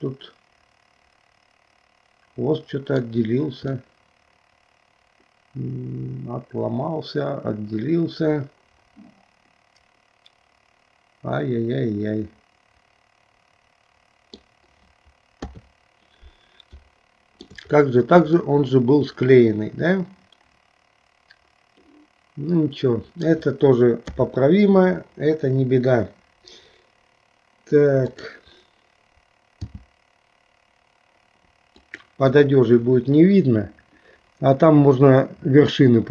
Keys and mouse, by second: 3.7-14.4 middle drag, 15.5 KP_3, 16.9 shift+middle click, 18.6-23.4 middle drag, 24.2 KP_3, 28.1 click, 29.7 r.